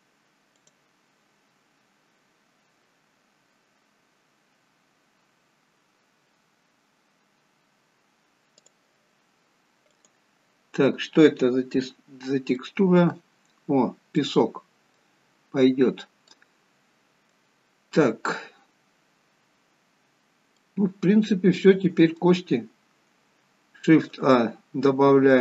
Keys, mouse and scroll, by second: 12.0-13.4 scroll up 3, 13.4 middle click, 13.6-14.3 scroll up 2, 14.3 middle click, 15.3-16.4 scroll down 5, 16.4 middle click, 16.4 scroll down 1, 20.5 middle click, 24.0 shift+a.